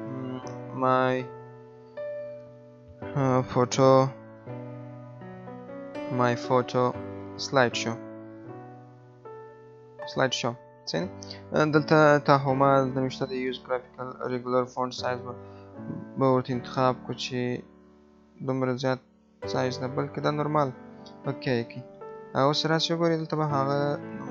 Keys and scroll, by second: 2.3 BackSpace.